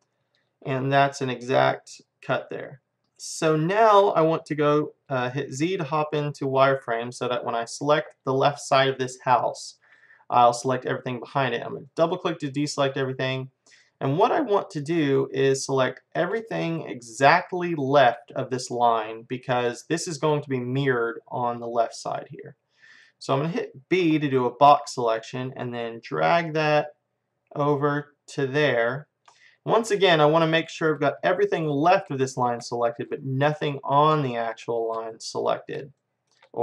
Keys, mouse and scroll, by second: 0.0-5.5 middle drag, 5.6 z, 6.0-8.4 middle drag, 9.3-10.5 middle drag, 11.9-14.1 drag, 15.1-21.0 middle drag, 22.4-24.0 middle drag, 24.0 b, 29.5-35.1 middle drag.